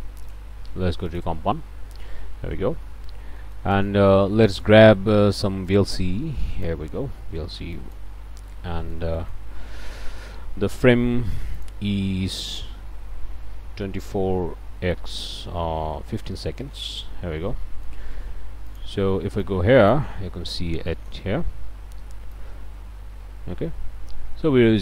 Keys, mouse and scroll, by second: 0.2 click, 1.1 click, 2.5-3.3 scroll up 1, 3.4 click, 4.6 click, 5.7-6.8 drag, 7.8 click, 8.2 scroll down 2, 8.5 click, 11.5 click, 13.8 KP_2, 14.0 KP_4, 16.1 KP_1, 16.2 KP_5, 16.6 KP_Enter, 17.4 scroll down 2, 17.6 click, 18.7 ctrl+shift+click, 19.4 ctrl+shift+click, 20.3-20.8 scroll down 2, 20.9 middle click, 21.2 scroll up 1, 22.3-24.8 drag.